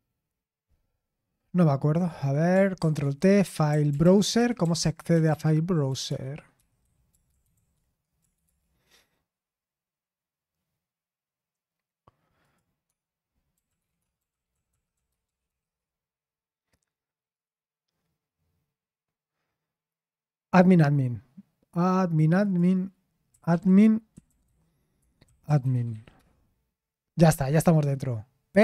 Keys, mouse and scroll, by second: 2.1 click, 2.8 ctrl+t, 3.3-8.2 typing, 8.4 Return, 12.4 click, 12.9 space, 14.0-15.4 typing, 15.6 Return, 17.3 click, 17.3 typing, 22.4 click, 25.0-26.4 typing.